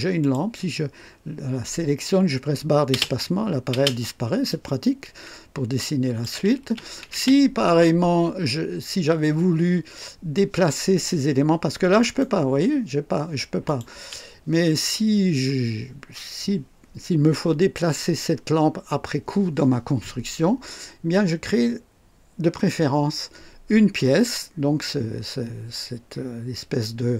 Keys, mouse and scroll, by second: 0.2 click, 2.9 space, 2.9 space, 3.7 space, 4.5-6.4 drag, 6.6 space, 12.0 right click, 13.6 click, 17.3 click.